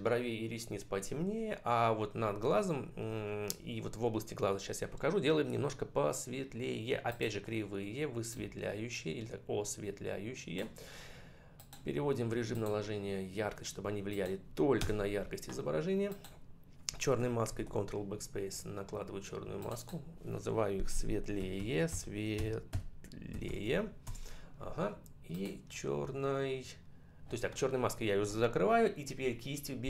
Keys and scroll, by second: 14.6 Return, 17.3 ctrl+BackSpace, 21.2 shift+c, 21.7 shift+t, 22.2 shift+n, 23.9 Return.